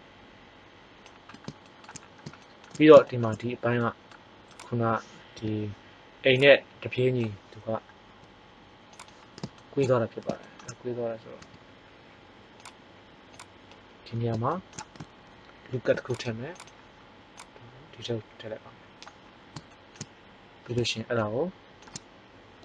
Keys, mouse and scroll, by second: 1.4-3.4 middle drag, 4.5 click, 5.3 KP_1, 8.0 g, 9.0 click, 9.6 middle click, 11.3 s, 12.6-14.1 drag, 15.5 ctrl+r, 19.2 middle click.